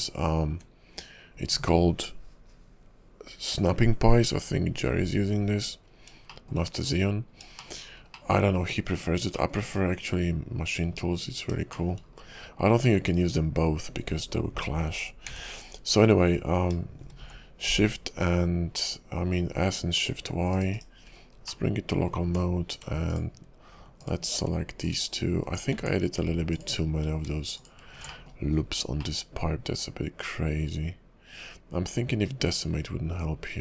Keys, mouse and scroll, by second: 1.0 KP_5, 5.7-6.1 scroll up 3, 6.3 shift+middle click, 6.6 scroll down 2, 6.9-7.4 scroll up 4, 7.5 shift+middle click, 7.9 scroll down 2, 8.1 middle click, 8.6 KP_5, 8.9 scroll up 2, 9.3 middle click, 9.6 `, 10.2 KP_5, 10.8-11.2 scroll down 2, 11.2 scroll up 3, 11.7 shift+middle click, 12.0-14.1 scroll down 1, 15.2 s, 20.7 /, 21.0 scroll up 2, 21.3 scroll down 1, 21.5 middle click, 22.2 Tab, 23.0 alt+click, 24.0 alt+click, 24.8 alt+click, 25.7 Tab, 26.5 alt+click, 27.5 alt+shift+click, 28.1 middle click, 28.4-29.1 scroll up 6, 29.0 middle click, 32.6-33.5 scroll down 6, 33.1 KP_5, 33.5 scroll up 2.